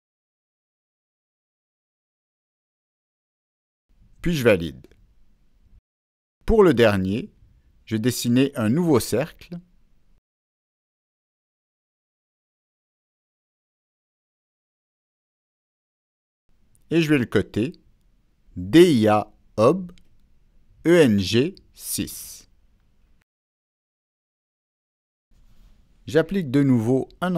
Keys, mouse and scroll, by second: 0.6 click, 2.8 click, 5.0 click, 7.4-7.8 right drag, 8.3 right click, 10.3 Escape, 11.5 click, 12.1 click, 12.9 right click, 14.3 Escape, 14.3 right click, 14.4 click, 15.4 click, 21.0 click, 22.2 click, 26.3 click.